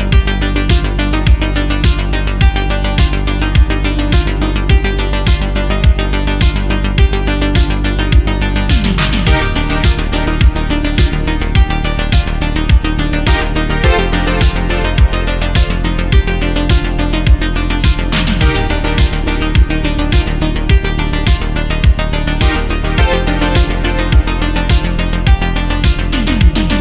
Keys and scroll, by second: 1.0 ctrl+z, 1.6 ctrl+z, 2.2 ctrl+z, 2.9 ctrl+z, 3.2 ctrl+z, 3.5 space, 5.2 space, 9.9 ctrl+z, 11.1 ctrl+z, 12.8 ctrl+z, 13.9 ctrl+z, 14.2 ctrl+z, 14.4 space, 15.0 ctrl+z, 15.5 ctrl+z, 16.0 ctrl+z, 16.4 ctrl+z, 17.1 ctrl+z, 17.8 ctrl+z, 18.1 ctrl+z, 18.4 ctrl+z, 23.6 ctrl+z, 24.3 space.